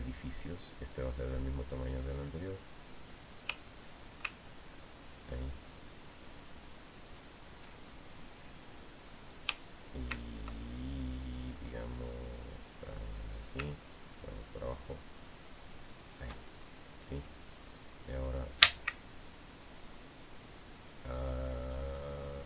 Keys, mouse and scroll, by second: 4.0 click, 7.9 ctrl+shift+click, 10.1 shift+click, 14.1 ctrl+shift+click, 16.7 ctrl+shift+click, 18.9 click.